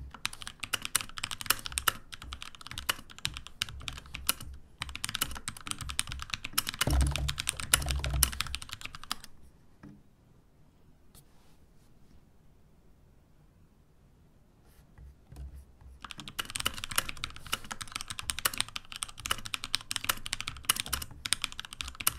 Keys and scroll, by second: 0.2-2.1 typing, 4.6-9.5 typing, 15.9-22.1 typing.